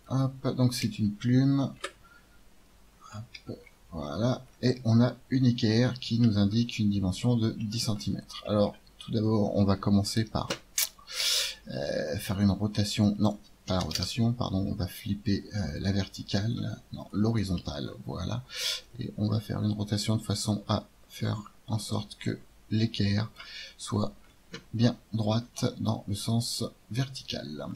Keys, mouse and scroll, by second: 0.0-1.6 drag, 1.0 KP_1, 1.7 KP_5, 2.5 middle click, 12.0-14.8 drag, 15.6-17.6 drag, 17.6-19.5 middle drag, 19.5 click, 23.9-27.7 middle drag.